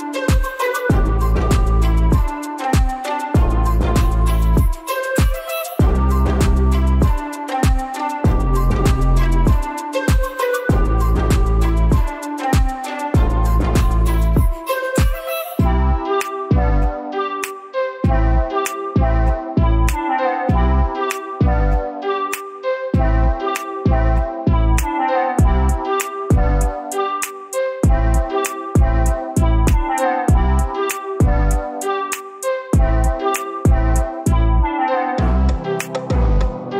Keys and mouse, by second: 0.0-7.2 drag, 7.2 n, 12.3 Tab, 13.2 Tab, 15.7-16.2 drag, 16.8 g, 22.0 click, 22.3 g, 24.2 click, 24.4 g, 26.6 click, 27.2 g, 30.7 click, 30.9 g, 34.4 click, 36.4 drag, 36.6 g.